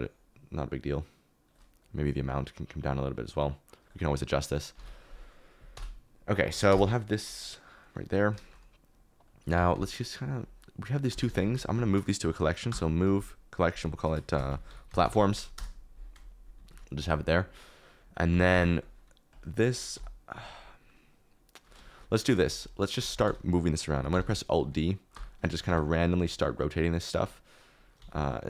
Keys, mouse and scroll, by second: 0.1 click, 4.8 ctrl+s, 5.7 KP_0, 6.6 KP_0, 6.6 KP_Decimal, 9.5 g, 9.7 y, 11.0 g, 11.2 y, 12.6 m, 15.5 Return, 16.7 ctrl+s, 18.3 g, 18.5 shift+z, 19.9 KP_7, 21.8 shift+middle click, 23.0 alt+d, 23.2-25.6 typing, 28.0 alt+d.